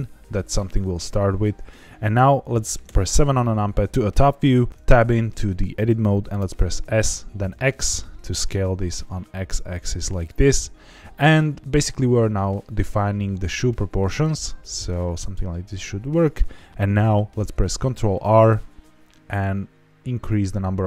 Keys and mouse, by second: 2.8 KP_7, 4.7 Tab, 6.8 s, 7.4 x, 16.0 click, 18.2 ctrl+r.